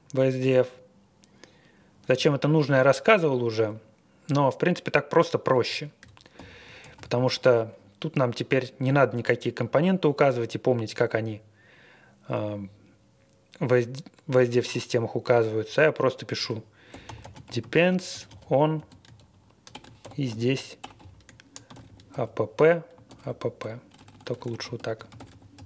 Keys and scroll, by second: 6.1-7.5 typing, 16.6-25.6 typing.